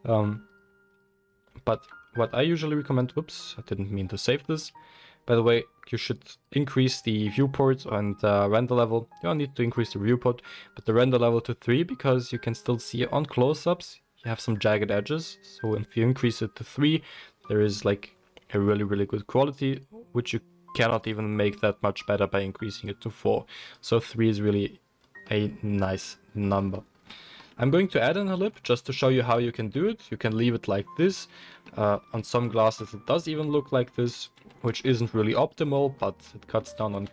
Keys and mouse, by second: 0.5-34.2 drag, 1.8 ctrl+s, 28.9 middle click, 28.9 right click, 29.3 Tab, 29.7 Tab, 31.2 Tab, 32.7 ctrl+r, 34.2-37.1 middle drag, 34.3 3, 37.0 alt+e.